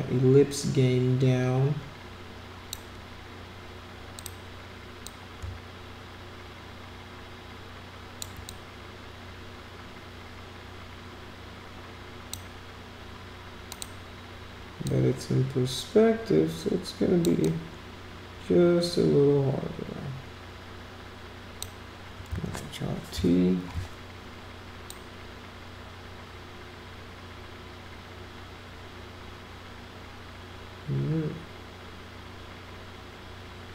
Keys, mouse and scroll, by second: 4.1 click, 5.0-8.2 drag, 8.4-12.3 drag, 13.7 click, 14.8-17.2 drag, 17.4-21.6 drag, 24.9-33.7 drag.